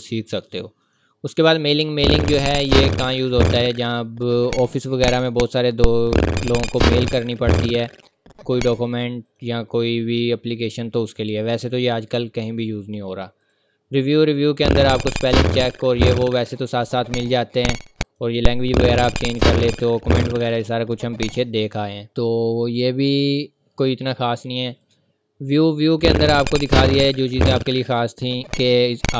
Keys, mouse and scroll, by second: 0.8 click, 9.3 click, 18.0 click, 24.8 click.